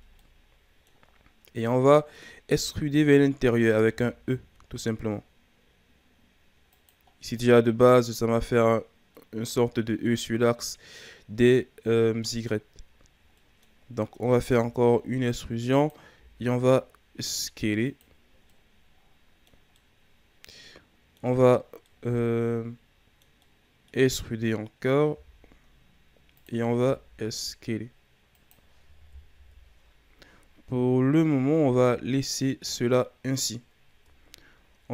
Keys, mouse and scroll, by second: 0.0 scroll down 1, 0.2 middle click, 1.1-1.6 scroll down 4, 1.6-1.9 scroll up 2, 1.9 middle click, 2.3-3.9 scroll down 4, 3.9 e, 7.1 scroll down 3, 7.3 middle click, 8.3-8.9 scroll up 1, 8.9 scroll down 1, 9.1-12.2 middle drag, 12.6-13.3 scroll up 2, 13.3 middle click, 13.7-14.4 scroll up 2, 14.4 e, 16.1 s, 18.5-25.0 middle drag, 25.0 e, 26.7 s, 29.3 KP_1, 30.7-31.4 scroll down 3, 31.4-32.1 ctrl+scroll up 2, 32.1-33.0 shift+scroll down 3, 33.0-33.9 scroll up 1, 33.9 Tab, 34.6-34.9 scroll down 1.